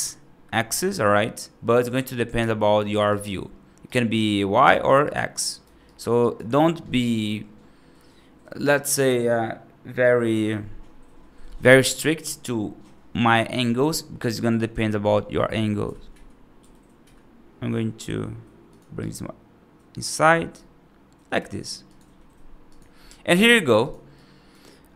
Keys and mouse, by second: 2.8 right click, 3.7 right click, 4.6 right click, 4.9 right click, 5.3 right click, 5.7 right click, 6.1 right click, 15.7 g, 18.8-20.0 right drag, 20.4 right click, 23.2 1, 24.0 right click.